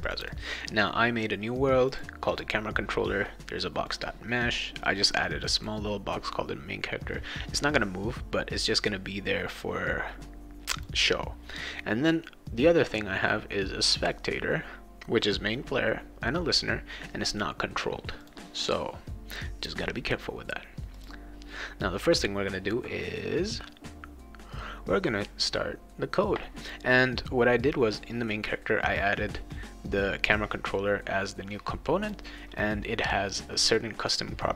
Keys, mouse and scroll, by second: 0.0 click, 0.2 click, 1.9 click, 2.3 click, 3.9 click, 5.6 click, 10.7 click, 18.2 click, 20.9 click, 26.6 click, 30.3-32.1 drag.